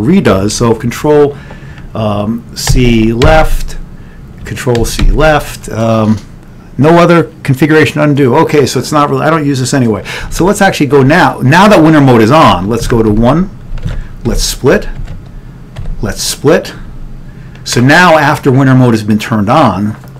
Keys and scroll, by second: 2.8 ctrl+c, 3.3 Left, 4.8 ctrl+c, 7.6 Left, 10.4 ctrl+x, 12.7 ctrl+g, 13.9 1.